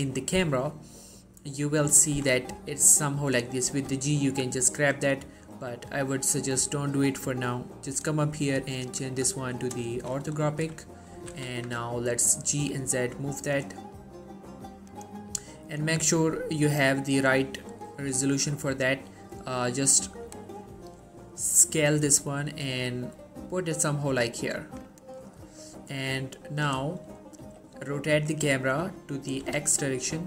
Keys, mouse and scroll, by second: 2.4 scroll up 1, 2.7 g, 3.5 right click, 3.8 g, 6.0 right click, 7.7 click, 10.2 shift+middle click, 10.3 scroll up 1, 10.7 scroll down 1, 11.0 shift+middle click, 11.3 typing, 15.0-25.2 drag, 27.5-27.9 scroll down 1, 27.9 r, 29.5 typing.